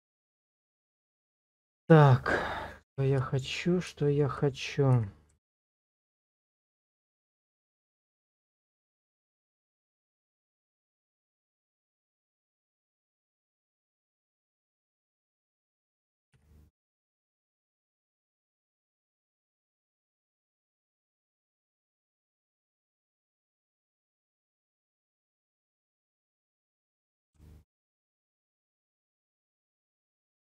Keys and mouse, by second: 2.4-3.5 drag, 4.1 shift+click, 6.9 ctrl+click, 8.4 g, 8.8 z, 10.9 click, 11.5 middle click, 12.6 shift+middle click, 14.6 r, 16.0 click, 16.4 g, 17.8 click, 18.0 space, 19.5 shift+click, 20.9 click, 21.8 click, 22.6 shift+click, 23.0-24.6 drag, 24.9 shift+click, 26.7-28.0 drag, 28.6 click, 30.1 ctrl+click.